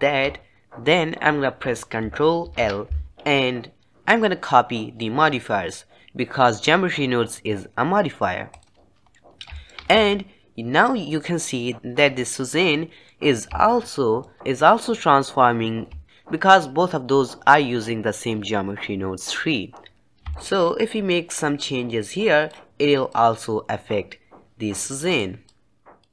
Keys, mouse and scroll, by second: 9.4-10.2 middle drag, 10.2 alt+a, 13.3-20.1 middle drag, 20.1 click, 20.6-22.0 shift+middle drag, 22.0 click, 23.5-25.3 drag, 25.8 click.